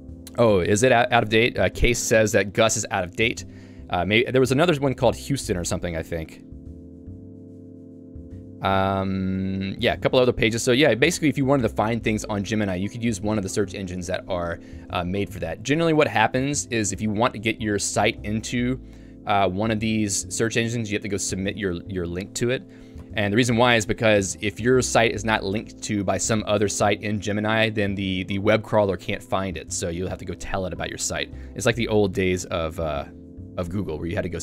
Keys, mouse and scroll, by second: 7.4 ctrl+d, 9.5 k, 11.5 ctrl+u, 11.7 ctrl+u, 23.0 shift+u, 31.1 j.